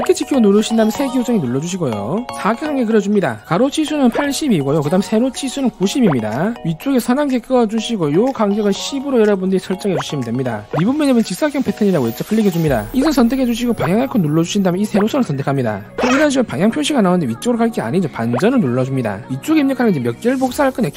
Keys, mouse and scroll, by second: 0.3 right click, 1.8 click, 2.7 3, 3.0 click, 3.5 click, 4.1 click, 5.7 click, 6.0 click, 6.8 1, 7.2 click, 8.5 click, 8.9 d, 9.1 click, 9.6 click, 9.9 click, 10.1 1, 12.9 click, 14.0 click, 14.9 click, 15.8 click, 19.0 click.